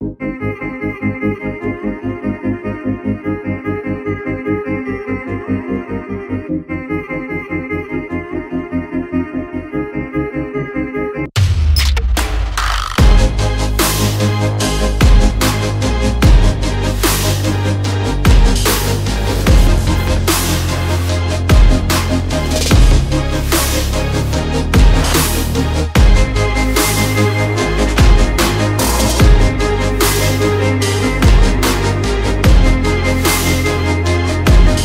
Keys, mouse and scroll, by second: 0.0-1.0 typing, 2.8 click, 3.8 alt+click, 4.7 click, 6.8-9.3 typing, 10.1 click, 11.3 click, 13.1 alt+click, 14.1 alt+scroll up 2, 14.4 click, 15.6 alt+scroll down 1, 16.2 alt+scroll down 1, 16.5 alt+scroll up 1, 16.8 click, 17.5 alt+click, 18.9 shift+click, 24.5 alt+scroll down 1, 24.9 alt+scroll up 1, 27.2 click, 27.7 shift+Up, 28.5 shift+Down, 28.7 Up, 29.0 Up, 29.1 Up, 29.4 Up, 30.4 click, 30.6 alt+scroll down 1, 30.8-31.1 alt+scroll up 1, 31.5 click, 34.3 alt+scroll up 1, 34.4 click.